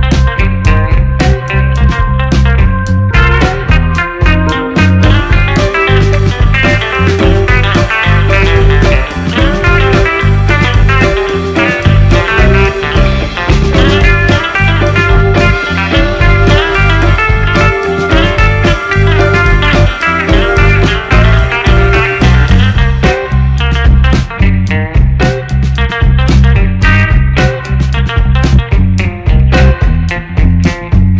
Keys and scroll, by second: 10.8 8, 11.0 Return, 14.5 1, 14.8 6, 15.0 Return, 17.0 8, 17.1 Return, 27.5 1, 27.6 2, 27.7 Return, 30.4 ctrl+c, 30.6 ctrl+v.